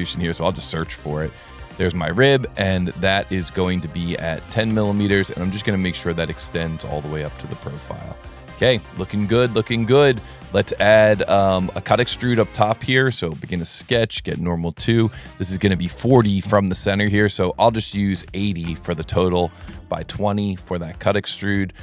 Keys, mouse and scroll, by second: 1.0 click, 2.3-2.7 middle drag, 3.7 click, 5.7 click, 6.7 click, 7.4-8.1 middle drag, 8.4 middle click, 9.6-10.2 middle drag, 10.5 middle click, 12.0 click, 12.4 s, 13.1 click, 14.2 s, 15.1 click, 16.3 click, 17.3 click, 20.3 s, 21.4 click.